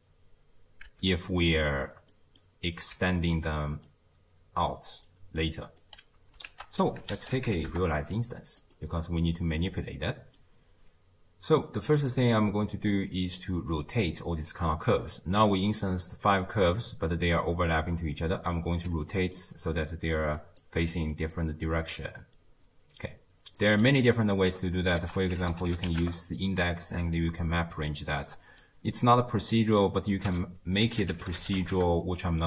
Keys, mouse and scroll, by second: 0.9 x, 1.4-5.1 drag, 5.1 d, 5.4 right click, 5.8 d, 7.7 ctrl+a, 12.0-14.6 drag, 14.6-16.7 scroll up 3, 16.7-19.1 scroll up 1, 19.1-20.6 drag, 20.6 d, 21.1-22.3 drag, 22.3-26.0 right drag, 26.0 ctrl+a, 28.6 click.